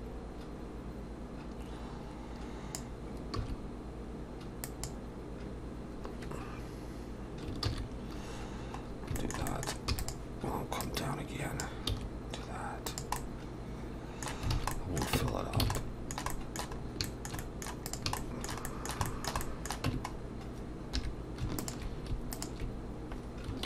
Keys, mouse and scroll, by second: 7.7 ctrl+z, 8.9 scroll down 1, 9.2 shift+middle click, 9.5 middle click, 9.9 e, 10.8 click, 11.9 s, 13.2 middle click, 14.5 alt+a, 14.7 middle click, 15.2 Tab, 15.3 scroll down 2, 15.6 alt+a, 15.8 middle click, 16.8 middle click, 16.8 scroll up 2, 17.1 shift+middle click, 17.4 shift+middle click, 17.4 middle click, 17.9 click, 18.2 shift+middle click, 18.7 middle click, 19.1 shift+middle click, 19.4 middle click, 19.9 Tab, 20.1 scroll up 2, 21.0 2, 21.6 alt+shift+click, 22.4 alt+shift+click.